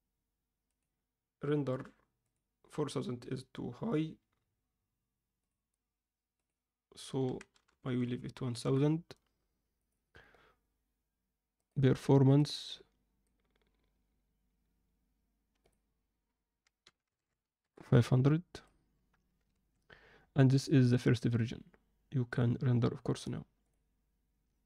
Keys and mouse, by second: 0.7-2.3 drag, 5.4 click, 6.3-8.5 drag, 7.8 0, 8.0 0, 9.7 click, 11.6-13.2 drag, 15.7-17.6 drag, 18.5 click, 19.5 ctrl+s, 23.1-24.6 drag.